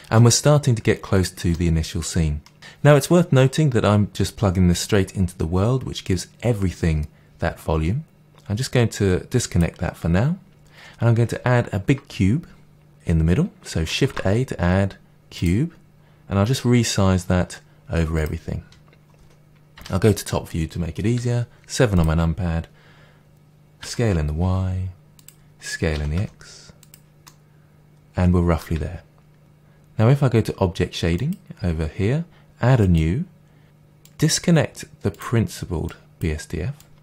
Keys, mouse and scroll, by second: 8.1 click, 13.9 shift+a, 15.4 click, 15.7 click, 16.6 s, 18.2 click, 19.7 KP_7, 19.8 KP_7, 21.1 g, 21.1 g, 21.9 click, 23.7 s, 23.8 s, 25.2 click, 25.9 s, 26.9 click, 27.2-30.4 middle drag, 30.4 click, 31.0-33.1 drag, 34.0-35.1 drag, 36.1 click.